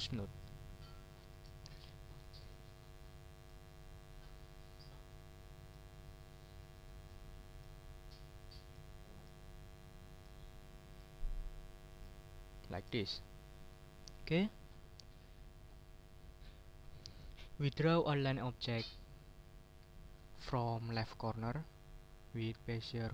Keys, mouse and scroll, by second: 1.0 double click, 1.9 click, 2.4 click, 3.3 click, 5.6 click, 7.5 click, 8.6 click, 9.1 click, 10.1 click, 10.9 click, 11.9 click, 12.5 click, 13.2 click, 14.1 click, 17.2 click, 17.5 right click.